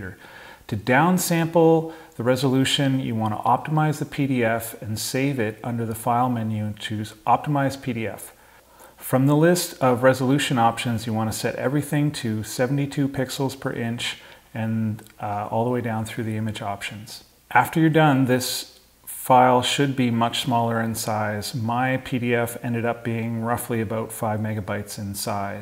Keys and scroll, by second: 22.7 super+i.